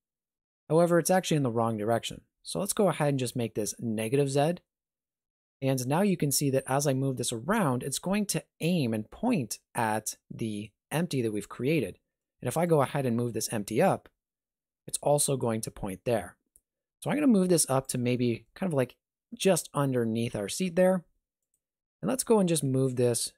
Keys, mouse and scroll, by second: 4.1 click, 5.4 shift+middle click, 6.2 g, 11.8 shift+middle click, 12.7 right click, 13.0 g, 18.2 shift+middle click, 18.5-18.8 scroll up 2, 18.8 middle click, 20.6-21.4 scroll down 1, 21.4 right click, 21.4 scroll down 2, 21.8 middle click, 22.3 g.